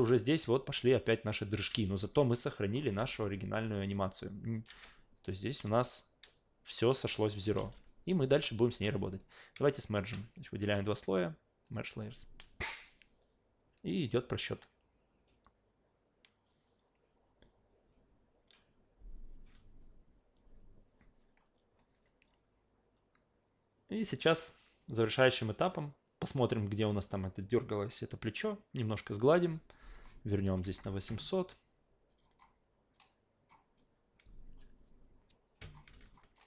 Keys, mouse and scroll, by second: 1.6 alt+v, 1.7 alt+right click, 2.0 alt+middle click, 2.3 alt+click, 2.7 alt+middle click, 3.0 alt+v, 4.7 alt+v, 5.1 right click, 5.8 alt+middle click, 7.6 alt+v, 8.6 alt+v, 9.9 shift+click, 10.6 right click, 11.6 click, 29.9 click, 32.1 click, 32.2 click, 32.9 click, 33.8-35.7 drag, 36.0 alt+middle click, 36.3 alt+click.